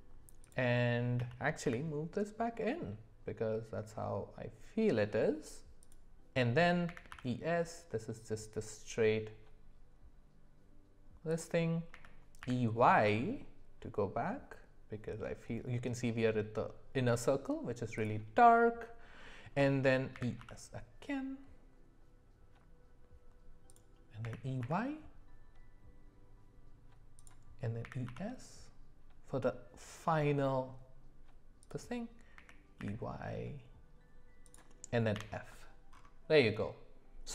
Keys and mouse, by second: 1.2 g, 6.9 e, 11.9 e, 20.1 e, 24.2 e, 27.8 e, 32.3 e, 35.1 f, 36.4 middle click.